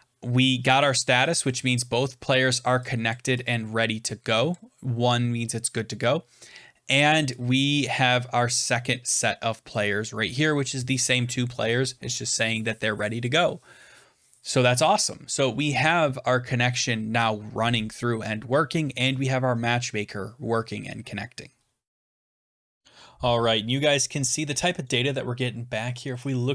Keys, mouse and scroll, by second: 0.7 click, 1.2 click, 1.4 click, 3.0 click, 4.4 click, 9.6-14.7 drag, 16.5-17.3 scroll down 2, 17.3 click.